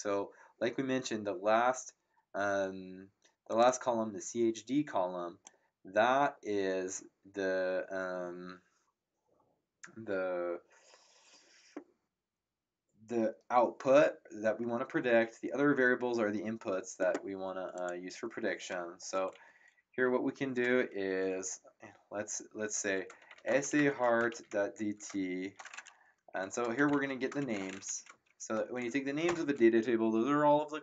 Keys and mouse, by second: 3.5 click, 17.7 click, 22.9-25.0 typing, 26.3 Home, 26.4-28.3 typing, 27.9 End, 29.2 ctrl+Return.